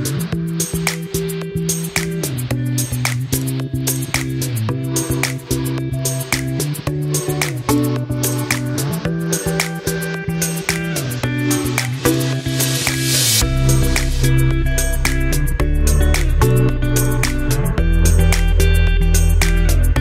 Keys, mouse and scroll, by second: 8.6 ctrl+right click, 9.8-11.8 drag, 11.8 right click, 13.1-15.6 drag, 15.6 scroll up 1, 17.0 click.